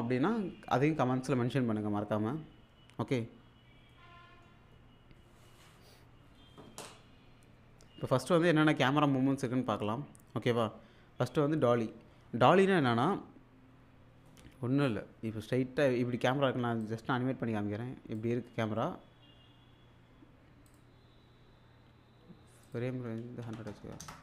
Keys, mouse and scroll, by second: 3.4-3.9 scroll down 1, 3.9-4.5 middle drag, 16.8-18.4 drag, 20.7 click, 22.7 click.